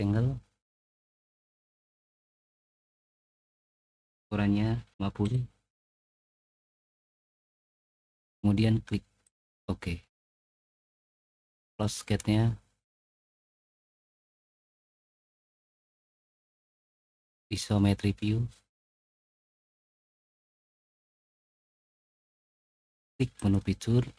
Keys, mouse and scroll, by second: 0.7 click, 2.0 click, 3.2 click, 3.8 click, 4.8 typing, 5.2 Return, 6.0-7.1 middle drag, 7.4-8.3 typing, 7.8 click, 9.3 click, 10.3 typing, 11.6 click, 13.5 middle click, 14.3 middle click, 15.7 middle click, 17.5 click, 23.3 click.